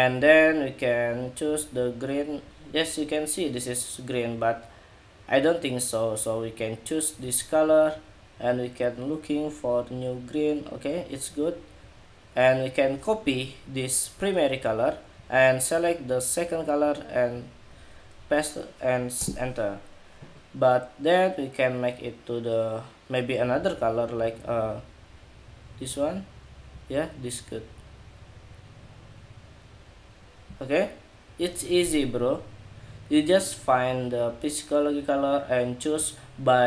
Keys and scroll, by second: 14.2 super+c, 14.4 super+c, 15.7 super+c, 17.8 super+v.